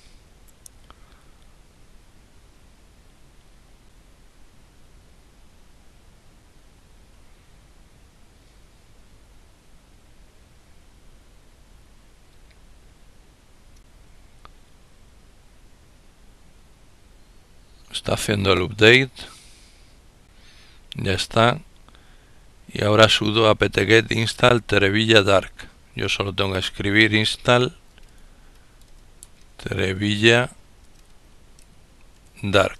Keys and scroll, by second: 25.1-25.9 typing, 30.1-32.4 typing.